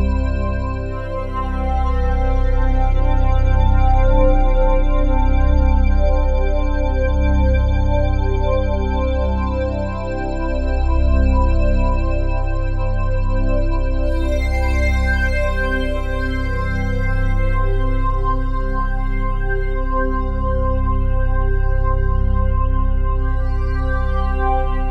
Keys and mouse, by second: 2.3 click, 3.6-5.4 drag, 6.7 click, 7.6 click, 8.6 click, 10.2 ctrl+alt+click, 12.2 click, 14.7-16.4 alt+drag, 19.5 click, 23.2 click, 23.7 click, 24.7 ctrl+s.